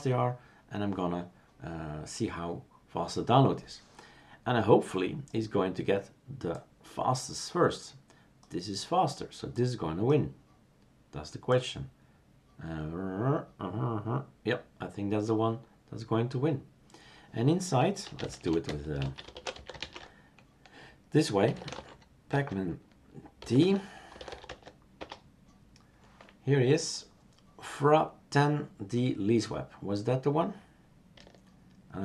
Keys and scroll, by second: 17.8-22.8 typing, 24.0-24.7 typing, 24.9 Return.